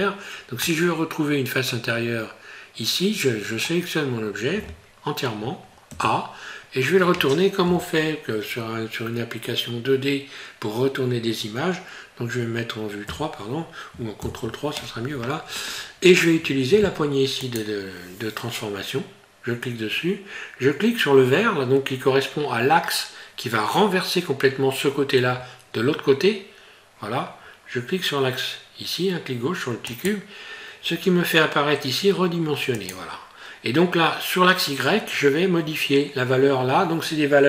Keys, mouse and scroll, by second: 0.2 scroll down 1, 0.6 middle click, 7.6 KP_1, 13.1 KP_3, 14.2 ctrl+KP_3, 15.3 scroll up 3, 15.9 scroll down 1, 17.4 click, 29.9 click, 32.8 click.